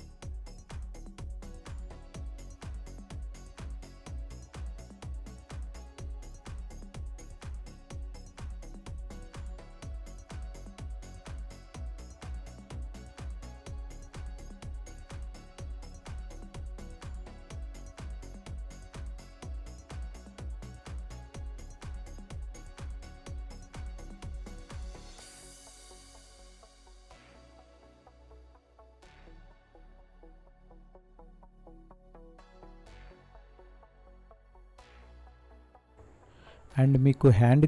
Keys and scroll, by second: 0.3 space, 5.8 space, 6.4 space, 7.9 space, 10.5 space, 15.0 space, 21.6 ctrl+-, 31.6 space.